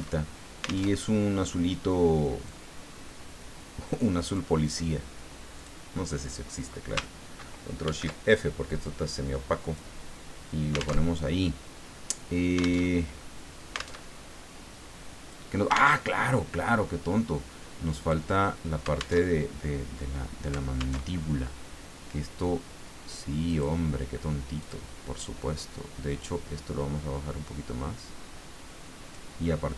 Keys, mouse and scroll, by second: 0.1 alt+shift+Tab, 0.8 alt+Tab, 2.4-4.5 drag, 5.6 click, 7.8 ctrl+shift+f, 8.8-9.9 drag, 10.9 alt+Tab, 12.8 alt+Tab, 14.0 alt+Tab, 15.9 alt+Tab, 18.0 click, 19.2 alt+Tab, 21.0 alt+Tab, 23.5 click, 24.6 click, 26.2-29.4 drag.